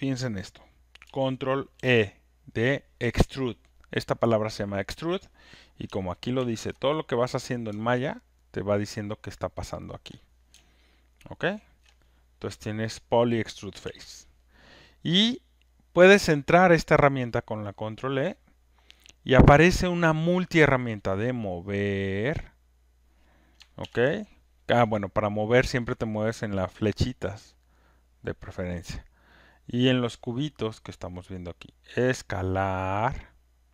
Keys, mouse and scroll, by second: 1.7 ctrl+e, 6.3 ctrl+F1, 7.2 click, 10.0 ctrl+click, 11.8 ctrl+shift+click, 13.8 ctrl+F1, 17.6 click, 22.5 click, 23.8 ctrl+z, 30.4 click, 31.1 click.